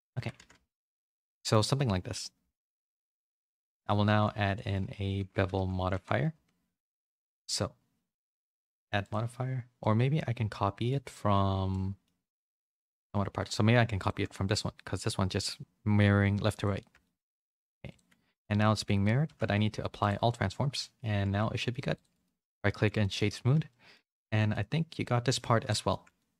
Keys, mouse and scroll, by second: 0.0-0.5 typing, 0.1 Tab, 0.6 middle click, 2.1 click, 2.4 Tab, 2.7 a, 3.0 s, 4.0 s, 5.1 r, 7.3 Tab, 8.1 click, 9.8-10.8 middle drag, 11.7 middle click, 11.9 middle click, 12.5 middle click, 13.9 shift+click, 14.3 middle click, 15.6 ctrl+l, 17.0 middle click, 17.8 click, 19.2 ctrl+a, 20.4 middle click, 21.2 a, 21.3 a, 22.1 right click, 22.6 middle click, 23.0 middle click, 23.7 middle click, 24.5 middle click, 25.5 a, 25.6 a, 25.8 shift+middle click, 26.2 middle click.